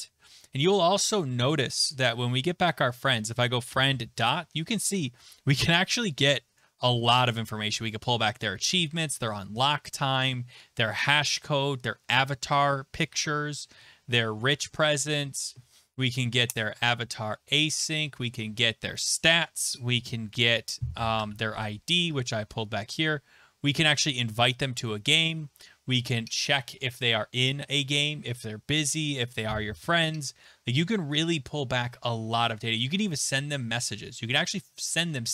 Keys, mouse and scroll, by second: 1.2 Left, 2.2-2.8 typing, 11.0 click, 19.9 click, 28.6 click, 28.6 click, 28.9 click, 30.2-33.8 scroll.